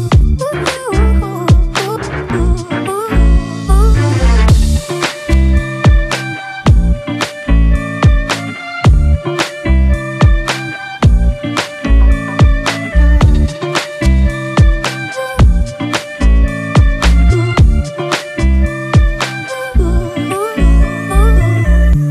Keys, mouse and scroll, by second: 0.0 Up, 0.2 Up, 0.4 Left, 0.6 Left, 0.8 Left, 0.9 Left, 1.1 Left, 1.8 Return, 10.4 ctrl+=, 10.6 ctrl+=, 10.9 space, 12.6 double click, 13.9 ctrl+Return, 14.2 Delete, 14.5 ctrl+d, 14.7 space, 16.2 ctrl+click, 17.0 double click, 18.7 ctrl+Return, 19.2 Delete, 19.8 ctrl+d, 20.4 ctrl+-, 20.6 ctrl+-, 20.8 ctrl+-, 21.0 ctrl+-.